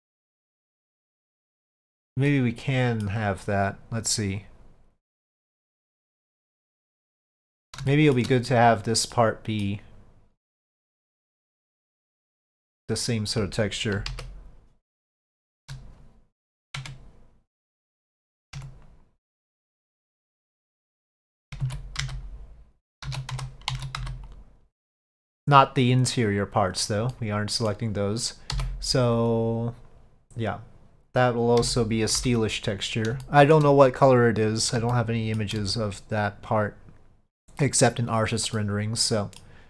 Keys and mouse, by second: 2.4-3.1 middle drag, 5.4 click, 6.3-7.2 middle drag, 8.0 shift+middle drag, 9.2-9.7 middle drag, 11.7 click, 12.2 middle click, 14.0 KP_5, 15.3 shift+middle click, 16.9 Tab, 19.8-21.6 drag, 21.7 alt+a, 22.1 c, 23.8 alt+a, 24.1 c, 27.2 middle click, 33.3 middle click, 35.0 shift+middle click, 38.6 middle click.